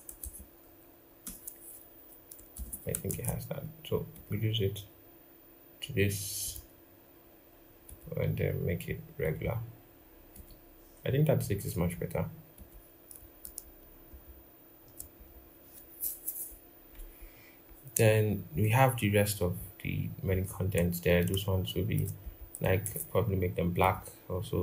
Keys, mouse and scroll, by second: 2.8 typing, 17.0 scroll, 17.8 typing, 21.0 alt+click, 22.2 double click, 22.6 ctrl+a.